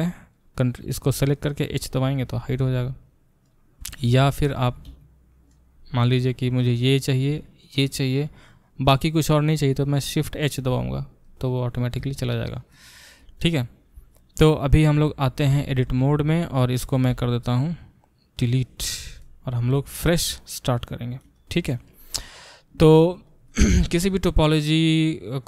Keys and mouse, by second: 0.3-1.8 drag, 1.8-2.1 middle drag, 1.8 h, 2.1 click, 2.2 middle click, 2.3 h, 2.6 click, 2.6-5.5 middle drag, 4.1 ctrl+z, 4.3 ctrl+z, 4.6 ctrl+z, 5.5-5.8 drag, 5.8-6.6 middle drag, 6.6 drag, 6.6-7.6 middle drag, 7.6 shift+drag, 7.9-11.4 middle drag, 10.7 shift+h, 11.4 click, 11.5-14.1 middle drag, 14.1 click, 14.2-25.4 middle drag, 14.9 Tab, 17.1 x.